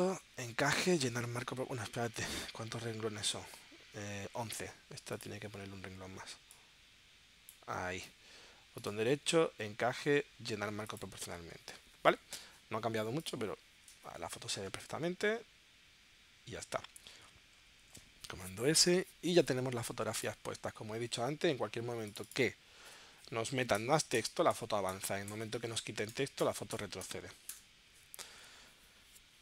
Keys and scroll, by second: 17.8 super+s, 23.8 Return, 26.1 BackSpace.